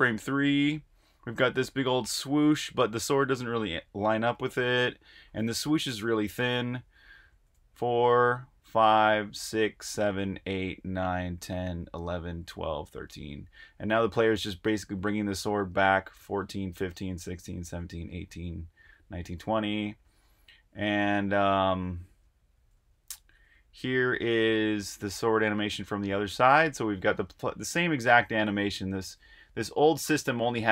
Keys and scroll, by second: 7.3 Tab, 8.4 Tab, 9.2-12.7 typing, 14.6-17.7 typing, 18.0 Right, 18.8 Right, 19.2 Right, 19.8 Right, 20.0 Right, 20.2 Right, 20.4 Right, 20.5 Right, 20.7 Right, 20.9 Right, 21.1 Right, 21.3 Right, 21.5 Right, 21.6 Right, 21.8-27.6 typing, 29.4-30.1 typing.